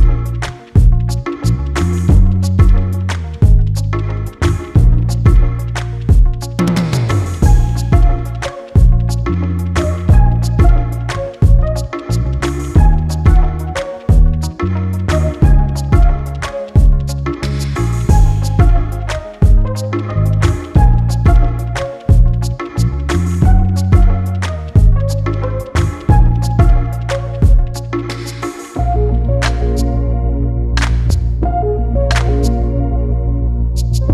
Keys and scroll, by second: 21.8 ctrl+t, 29.7 Return.